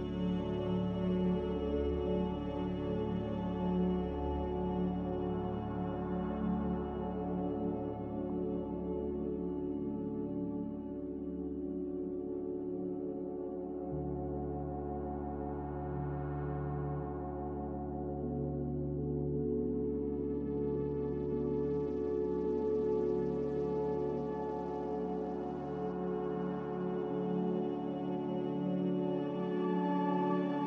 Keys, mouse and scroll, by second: 4.7 Escape, 24.7 Escape, 25.2 a, 27.2 z, 29.5 2, 29.6 Return, 30.2 click.